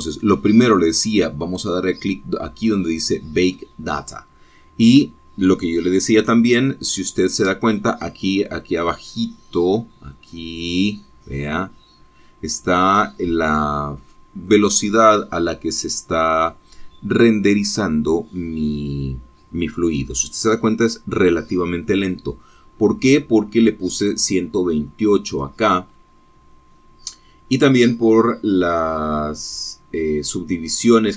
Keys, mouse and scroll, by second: 0.5-1.8 scroll up 4, 1.8 scroll down 2, 2.9 click, 3.4-6.6 drag, 27.3-27.8 scroll up 1.